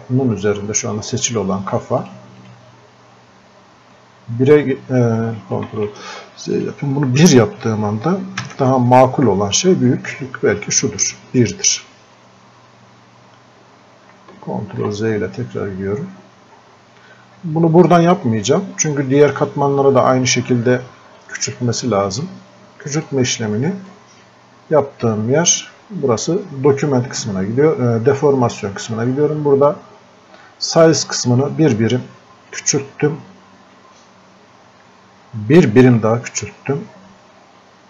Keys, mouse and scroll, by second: 2.0-5.7 drag, 5.7 ctrl+z, 6.6 click, 9.9 scroll up 1, 14.6 ctrl+z, 16.1-16.6 scroll up 1, 18.6-21.2 drag, 21.2-23.0 drag, 26.7-35.6 drag, 35.6-37.8 drag.